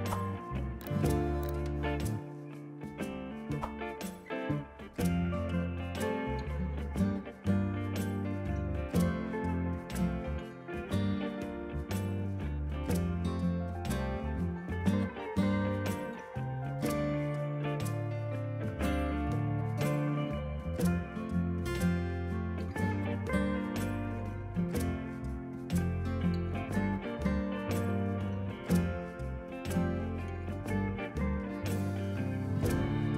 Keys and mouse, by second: 1.0 y, 1.1 click, 2.5 Delete, 3.4 click, 4.0 Delete, 4.7 click, 6.9 click, 7.2 Delete, 7.4 click, 7.8 ctrl+shift+x, 7.9 click, 8.2 KP_2, 8.3 Return, 8.7 click, 9.2 click, 10.1 click, 10.2 ctrl+shift+a, 10.4 click, 12.3 KP_5, 12.4 Return, 12.9 KP_2, 12.9 Return, 16.2 ctrl+1, 16.3 click, 16.5 ctrl+shift+a, 16.7 click, 17.4 click, 17.7 shift+click, 18.1 click, 18.5 shift+click, 18.8 click, 20.0 1, 20.1 click, 20.4 Delete, 20.7 a, 20.8 click, 22.2 KP_4, 22.3 Return, 22.9 click, 23.2 KP_4, 23.5 click, 25.8 right click, 26.4 click, 28.0 a, 28.7 click, 29.3 KP_4, 29.3 Return, 29.6 click, 30.8 click, 31.4 right click, 32.1 click.